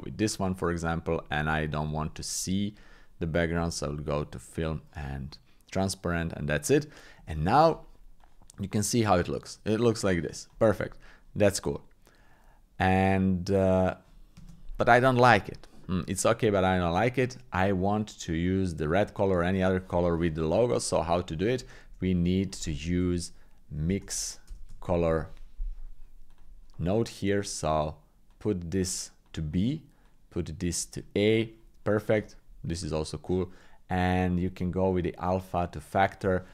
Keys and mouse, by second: 1.9 click, 3.5 click, 4.5 click, 7.3 shift+middle click, 8.2-10.5 drag, 11.8 shift+space, 18.4 click, 19.4 click, 19.6 click, 21.8 shift+a, 28.5 click, 30.0 click, 34.0 click, 34.2 click, 35.2 click.